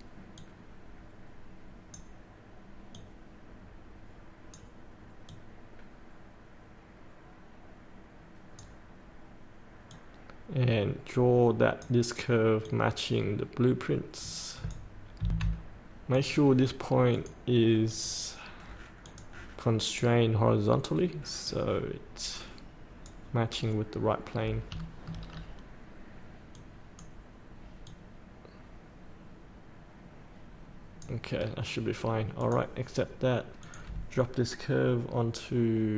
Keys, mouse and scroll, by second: 15.2 F8, 16.1-23.4 drag, 23.4 scroll up 1, 24.7 shift+middle click, 25.2 scroll down 1, 26.5-31.1 drag, 32.4 click, 32.8 scroll up 1, 33.6 click.